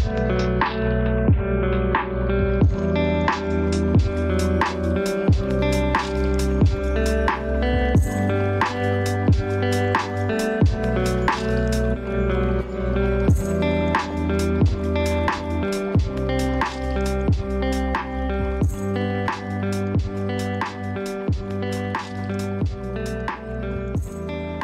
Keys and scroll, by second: 11.1 ctrl+z, 13.5 ctrl+space, 20.7 ctrl+space, 21.3 ctrl+z, 21.7 ctrl+space.